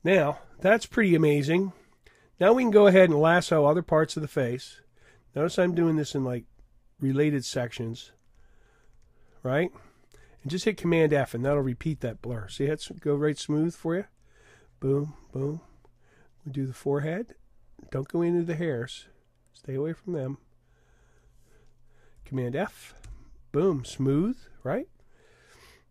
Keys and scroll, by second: 23.1 super+f.